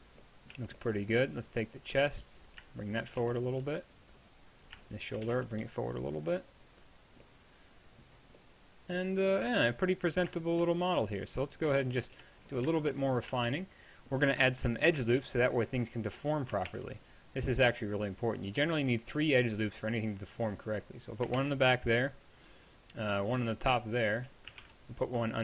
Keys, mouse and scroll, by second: 0.5 z, 3.1 g, 5.3 g, 9.5 Tab, 11.7 KP_1, 12.2 Tab, 13.3 a, 13.5 b, 16.7 ctrl+r, 21.4 ctrl+r, 24.6 ctrl+r.